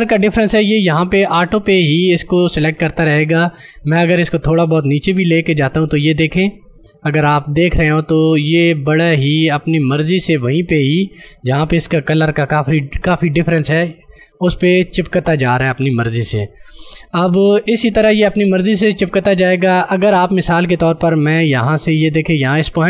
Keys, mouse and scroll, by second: 11.5 space, 11.9 click, 12.0 space, 19.7 ctrl+space, 19.8 click, 20.2 space.